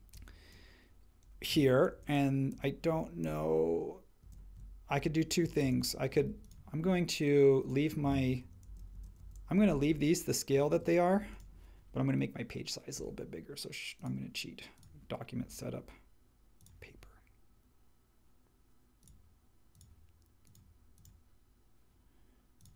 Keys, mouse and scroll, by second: 1.9 shift+Left, 2.1 shift+Left, 2.5 shift+Left, 2.9 shift+Left, 3.2 shift+Left, 4.2 shift+Left, 5.6 shift+Right, 8.6 shift+Left, 9.2 shift+Left, 10.7 super+z.